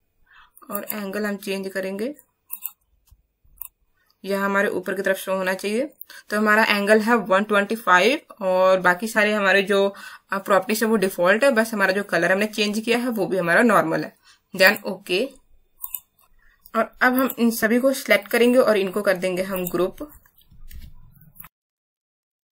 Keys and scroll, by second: 20.7 ctrl+shift+g.